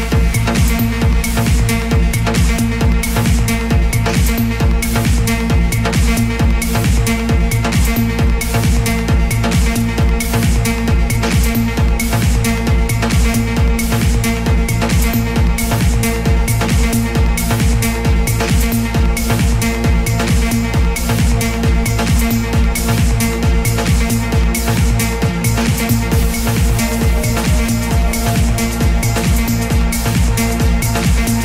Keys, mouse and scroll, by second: 4.4 e, 7.1-21.9 drag, 22.4 n, 29.3-31.4 drag.